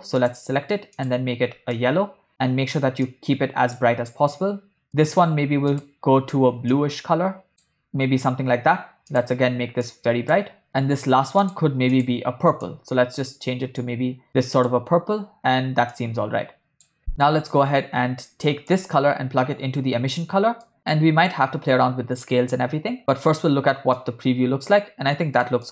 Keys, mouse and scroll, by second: 0.3 click, 1.1 click, 4.8 click, 5.8 click, 9.2 click, 11.5 click, 16.1 click, 17.1 ctrl+middle click, 18.7-20.5 drag, 20.8 middle click, 24.1-25.5 middle drag.